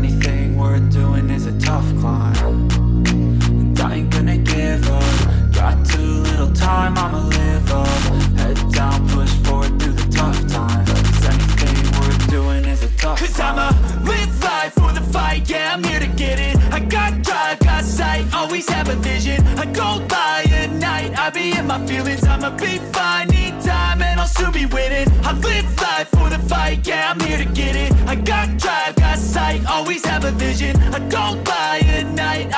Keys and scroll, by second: 21.0 Up, 23.1 v.